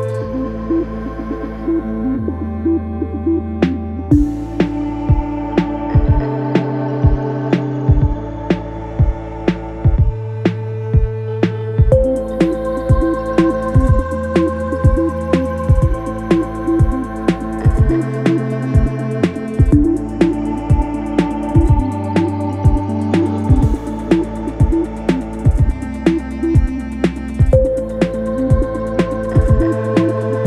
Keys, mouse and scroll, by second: 0.1 ctrl+-, 2.9 ctrl+a, 3.9 ctrl+c, 6.7 ctrl+v, 11.9 alt+click, 14.9 alt+click, 16.7 alt+click, 23.9 space, 24.4 space, 28.1 alt+Left.